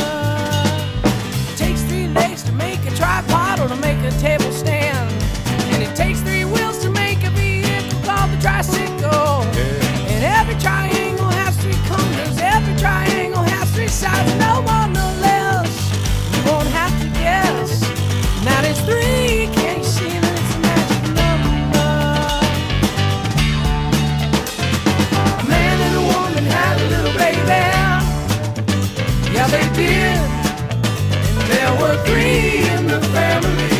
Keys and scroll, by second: 9.6 shift+super+t, 21.1 shift+super+=, 21.2 shift+super+-, 24.6 shift+space, 25.6 shift+space, 27.2 shift+space, 28.4 shift+space, 30.6 shift+super+a, 31.0 shift+super+o, 31.1 shift+super+w, 32.5 shift+super+v, 32.9 shift+super+t.